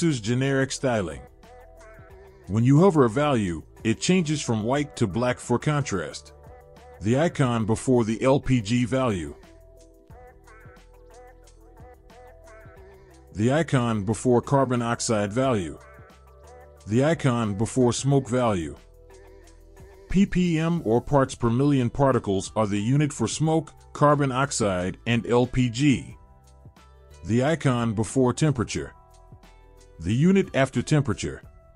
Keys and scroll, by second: 0.0 ctrl+z, 2.4 ctrl+z, 7.2 ctrl+z, 13.5 ctrl+z, 17.3 ctrl+z, 19.2 ctrl+z, 26.7 ctrl+z, 28.7 ctrl+z.